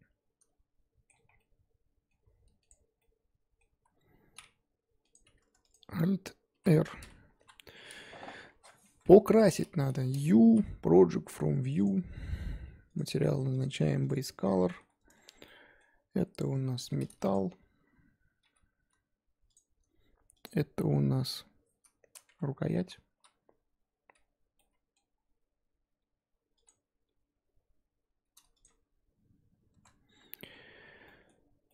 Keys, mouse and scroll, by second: 1.3 scroll down 4, 1.4-2.7 middle drag, 2.7 click, 2.9 scroll down 1, 3.0 middle click, 3.6 scroll down 1, 3.7 z, 5.7 click, 6.5 alt+r, 7.1-7.4 scroll up 3, 7.4 KP_1, 8.8 Tab, 9.0 a, 9.4-9.7 scroll up 1, 11.8 u, 14.1 click, 15.0 a, 16.4 s, 18.4 g, 20.4 click, 22.3 3, 23.2 l, 25.9 g, 27.1 g, 28.6 Tab, 29.7 Tab.